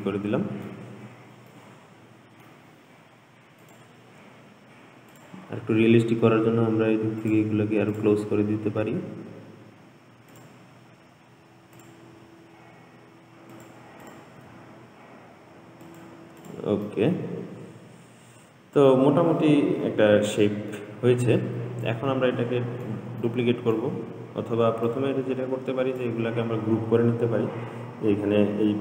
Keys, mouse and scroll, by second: 0.3-1.2 middle drag, 1.2-1.8 scroll down 2, 1.8-3.9 middle drag, 3.9 click, 5.4 click, 6.7 g, 8.2 click, 8.6 g, 11.0-12.0 scroll up 3, 12.0 click, 12.4 g, 14.3 click, 14.7 g, 16.7 click, 17.1-20.1 middle drag, 21.3-22.1 scroll down 2, 22.1-25.1 middle drag, 25.1 drag, 28.1-28.5 scroll down 2.